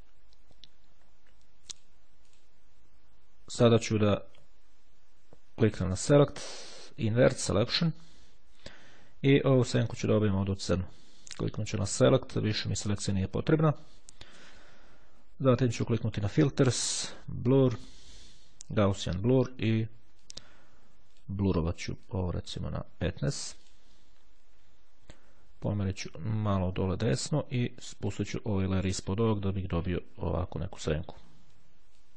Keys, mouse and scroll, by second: 1.9 click, 6.0 click, 7.4 click, 9.6-11.1 drag, 11.9 click, 13.4 click, 16.3 click, 18.8 click, 20.3-21.8 drag, 22.2 click, 23.8 click, 25.8-27.8 drag, 28.5 click, 30.3-31.5 ctrl+scroll up 4.